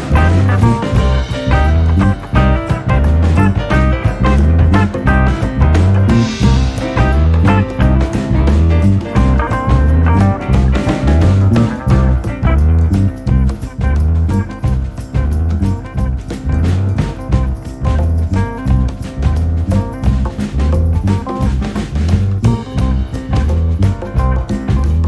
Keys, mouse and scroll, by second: 1.2-7.9 drag, 10.3 Tab, 11.4-14.4 middle drag, 16.4-20.3 drag, 23.2 click.